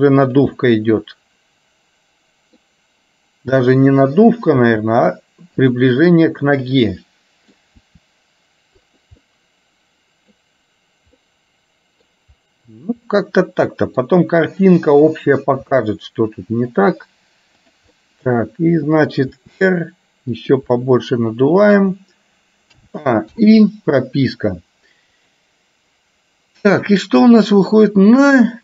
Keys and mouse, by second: 0.6-2.7 middle drag, 3.6 click, 4.7 r, 6.6 click, 7.1 middle click, 8.0 r, 9.4-10.5 middle drag, 11.2 middle click, 13.2 middle click, 15.0 click, 15.7 r, 17.7 click, 18.2 middle click, 19.6 r, 20.7-21.9 middle drag, 23.5 i, 26.4-27.6 drag, 27.6-28.6 middle drag.